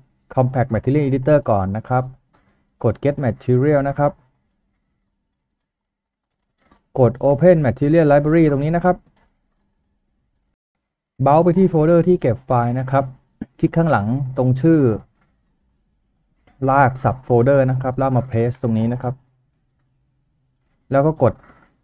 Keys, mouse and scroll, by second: 0.8 typing, 14.3 right click, 15.3 typing, 15.6 double click, 18.7 ctrl+v.